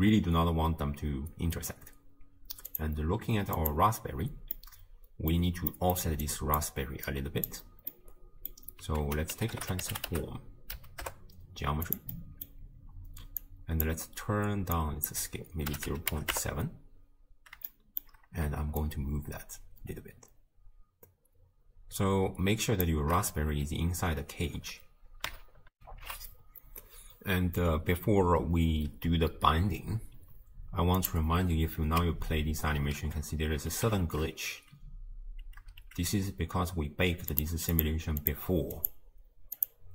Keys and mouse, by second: 2.7 click, 3.6 click, 4.6-5.4 drag, 5.7 middle click, 6.3 click, 7.1 click, 7.9-8.6 drag, 9.0 ctrl+a, 13.4 click, 14.8-16.4 drag, 17.8 shift+click, 18.8-22.8 shift+drag, 25.8 ctrl+alt+shift+q, 31.0 click, 32.1-35.4 typing, 37.3 click, 37.8 click, 38.3 click, 38.9 click, 39.6 click.